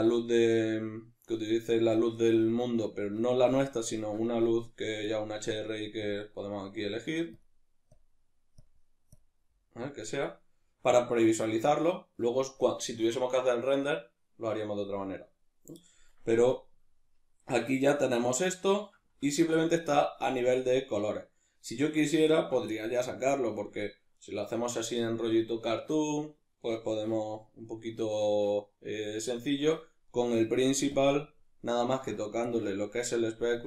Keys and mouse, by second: 10.5-24.2 middle drag, 24.2 right click, 30.9 click, 31.4-33.6 ctrl+middle drag.